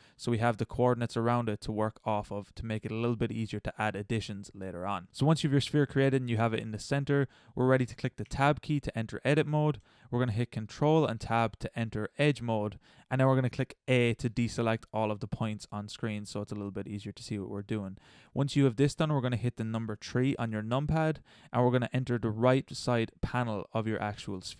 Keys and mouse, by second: 0.4 middle click, 1.4 middle click, 3.8-4.9 middle drag, 6.5-7.3 middle drag, 7.8 middle click, 8.2 Tab, 11.0 ctrl+Tab, 13.9 a, 20.9 KP_3.